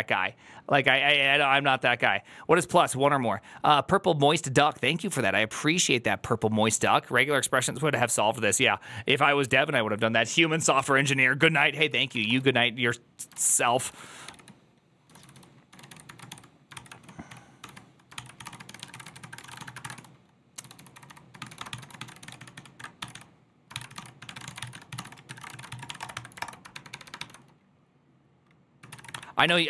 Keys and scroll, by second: 17.7 f, 21.3 1, 22.8 m.